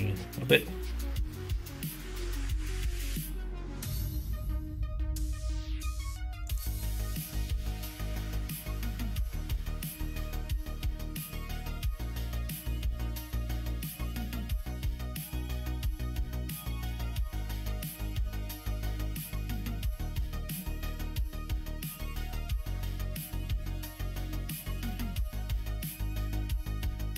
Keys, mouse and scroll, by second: 0.2 click, 0.8 alt+space, 1.9 alt+z, 2.2 click, 3.5 alt+z, 6.4 click, 9.6 alt+c, 11.1 g, 12.4 middle click, 13.3 click, 14.7 click, 16.3 scroll up 1, 16.4 middle click, 16.8 scroll down 1, 17.8-19.0 middle drag, 18.3-19.0 scroll down 1, 19.0 g, 19.8 middle click, 20.3 ctrl+z, 20.5 middle click, 21.0 middle click, 22.3 click, 23.2 g, 24.6 click, 24.8 g, 26.6 middle click.